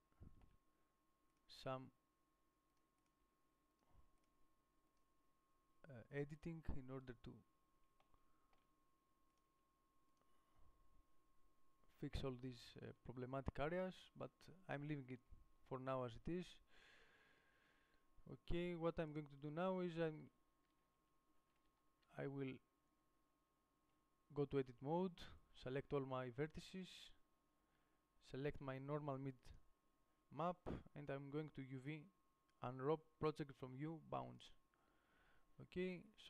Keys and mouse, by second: 2.0 g, 3.4 g, 4.5 g, 6.7 g, 9.7-11.3 g, 10.4 click, 11.3-12.4 drag, 15.1 Tab, 20.1-21.2 middle drag, 21.2 Tab, 21.9 a, 22.3 a, 25.1-29.7 middle drag, 34.6 u.